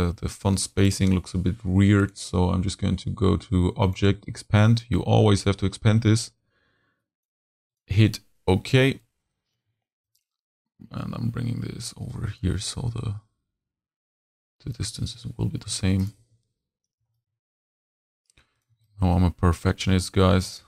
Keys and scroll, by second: 8.8 z, 9.6 z, 10.0 shift+a, 10.7 shift+a, 16.2 shift+z, 17.1 a.